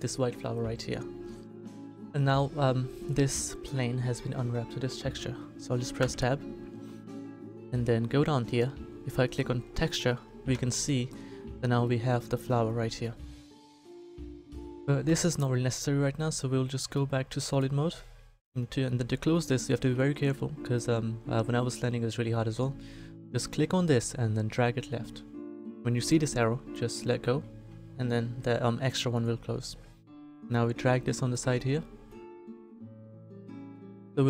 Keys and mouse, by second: 0.0-2.6 drag, 6.0 Tab, 10.5 a, 11.1 click, 13.8 KP_7, 15.0 KP_7, 16.9-18.7 drag, 27.8-29.1 middle drag, 30.1 right click, 32.6-34.0 drag.